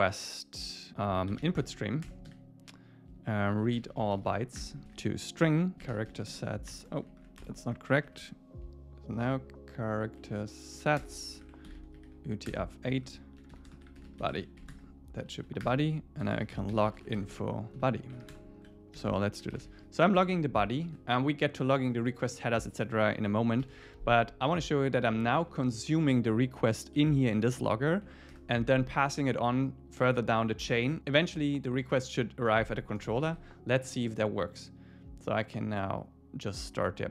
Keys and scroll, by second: 2.1 Return, 4.6 Return, 5.5 Return, 7.1 alt+shift+Left, 7.7 Left, 9.9 Down, 11.0 Return, 12.5 Return, 13.0 super+Left, 15.3 super+Right, 15.7 Return, 20.2 Escape, 20.9 super+s, 23.2 Right, 23.7 super+s, 26.7 Up, 28.3 Return.